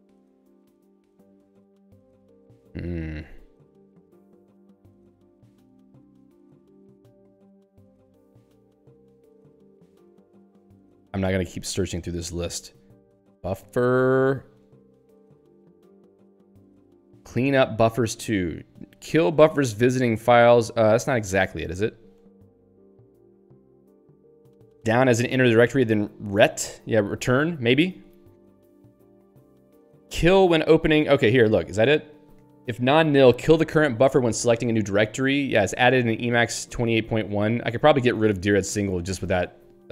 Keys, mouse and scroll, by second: 0.4 ctrl+n, 1.1 ctrl+n, 2.2 ctrl+n, 5.6 ctrl+n, 6.5 ctrl+n, 7.4 ctrl+n, 11.9 ctrl+n, 13.3-14.3 typing, 14.8 ctrl+n, 16.1 ctrl+n, 16.8 ctrl+n, 22.6 ctrl+p, 26.8 ctrl+n, 28.3 ctrl+p, 31.2 Return, 36.6 click, 37.4 click.